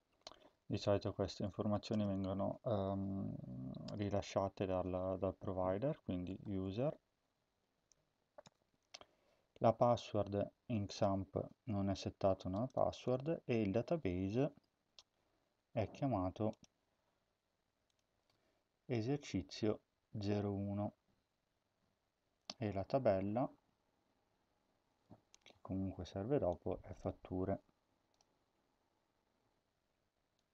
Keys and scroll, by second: 0.0-1.9 typing, 3.8 BackSpace, 6.0-7.2 typing, 8.4 Return, 11.5 BackSpace, 12.8 BackSpace, 13.0 Return.